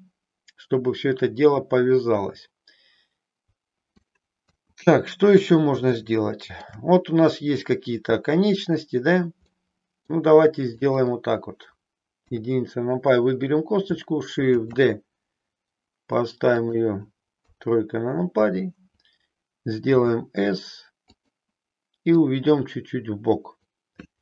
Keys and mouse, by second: 4.6 KP_1, 6.0 shift+middle click, 9.5 middle click, 10.8 click, 12.2 KP_1, 14.6 shift+d, 16.8 click, 17.5 KP_3, 19.9 s, 22.1-23.6 drag.